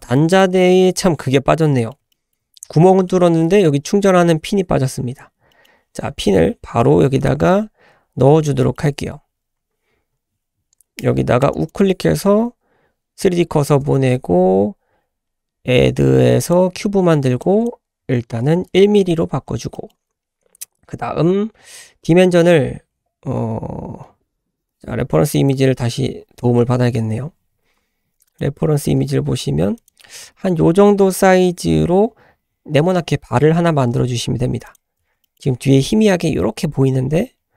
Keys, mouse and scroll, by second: 0.1 shift+middle drag, 1.4-1.8 scroll up 2, 1.8 middle click, 2.1 shift+middle drag, 3.1-4.3 middle drag, 4.3-4.8 scroll down 2, 5.1-5.5 scroll down 2, 5.5 middle click, 7.2 click, 7.5 `, 8.0-8.6 scroll up 3, 8.6 shift+middle click, 10.1 scroll up 1, 11.5 shift+right click, 11.6 shift+s, 13.7 shift+a, 17.4-18.4 drag, 19.1-19.5 scroll up 4, 19.7 shift+middle drag, 25.3 click, 26.1-26.7 scroll down 2, 26.7 Tab, 27.6 Tab, 28.2 click, 28.8 g, 33.5 ctrl+z, 33.9-34.7 scroll up 2, 34.7 click, 35.2 shift+middle drag.